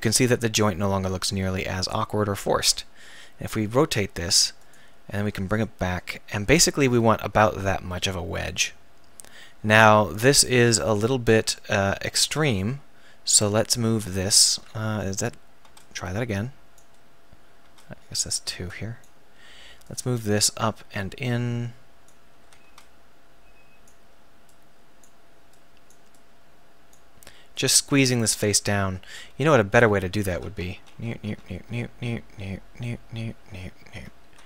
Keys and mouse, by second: 3.1 r, 4.7-11.4 drag, 11.4 a, 11.9 z, 12.2 b, 13.8 z, 14.6 a, 15.1 z, 15.6 b, 17.6 b, 18.7 b, 19.8 click, 22.4 a, 22.6 b, 29.1 z, 29.7 z, 30.3 a, 30.7 ctrl+z, 30.9 ctrl+z, 31.3 ctrl+z, 31.5 ctrl+z, 31.9 ctrl+z, 32.3 ctrl+z, 32.7 ctrl+z, 33.0 ctrl+z, 33.5 ctrl+z, 33.9 ctrl+z, 34.3 a.